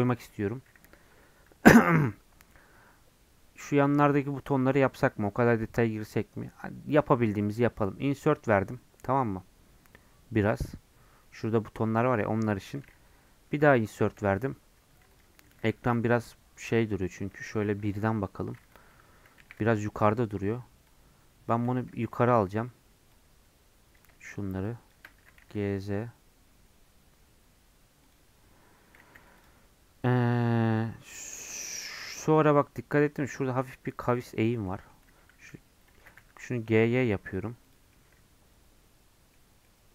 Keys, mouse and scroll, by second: 0.2 Left, 7.6 i, 14.2 i, 17.3 KP_0, 17.6 KP_1, 18.3 scroll up 1, 19.4 1, 21.5 click, 21.7 g, 24.0 click, 25.2 g, 29.1 3, 29.4 click, 30.8-35.1 middle drag, 35.1 g, 36.0 g, 37.9-39.4 middle drag, 39.4 scroll up 2, 39.6-39.9 middle drag.